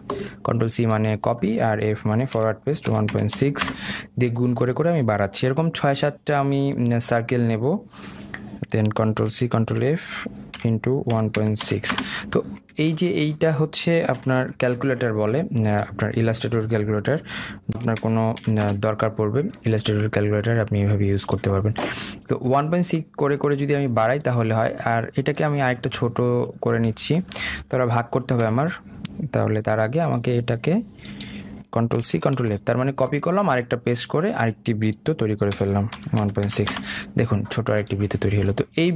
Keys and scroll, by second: 4.0 Return, 9.6 ctrl+c, 10.1 ctrl+f, 12.3 Return, 13.3 ctrl+z, 14.9 ctrl+f, 19.3 Return, 32.7 ctrl+c, 33.2 ctrl+f, 37.4 Return.